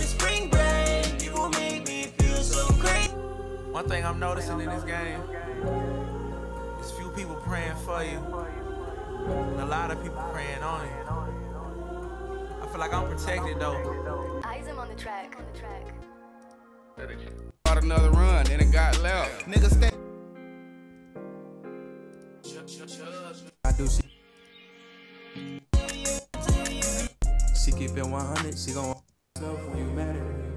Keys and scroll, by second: 0.1 super+Tab.